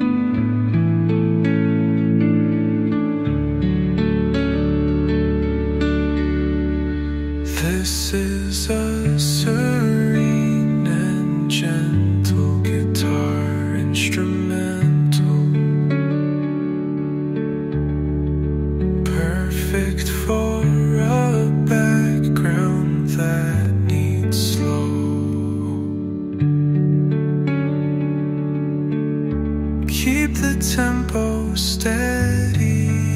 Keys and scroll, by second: 11.1 space, 13.7 Delete, 14.9 Delete, 25.3 space.